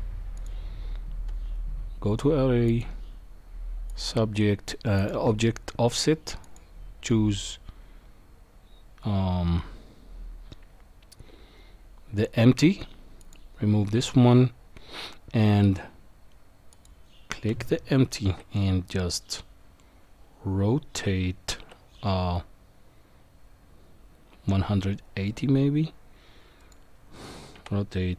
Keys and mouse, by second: 0.4 click, 2.7 click, 3.9 click, 5.0 click, 13.2 click, 18.2 r, 27.6 r.